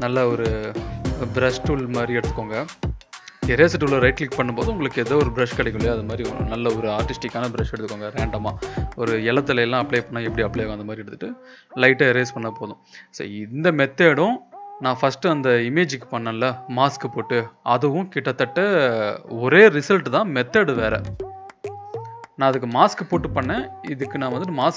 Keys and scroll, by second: 1.7 e, 21.9 v, 22.7 ctrl+b, 24.1 Return, 24.4 ctrl+l.